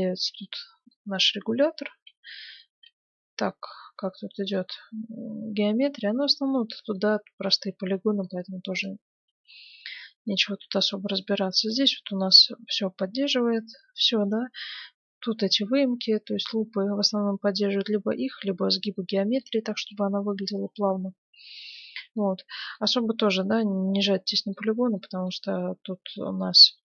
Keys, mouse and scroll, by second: 0.2 middle click, 0.4-2.1 middle drag, 2.2-6.3 middle drag, 2.8 Tab, 7.1-9.1 middle drag, 7.4 Tab, 8.3-10.5 right drag, 9.2 Tab, 9.9-20.4 middle drag, 20.4 Tab, 22.5-26.6 middle drag, 26.8 middle click.